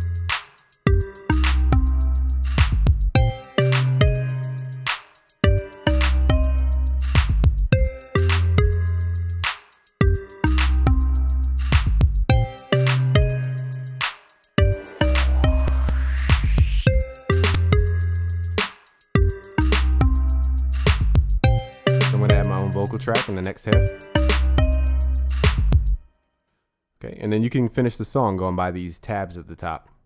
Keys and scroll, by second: 26.6 ctrl+s.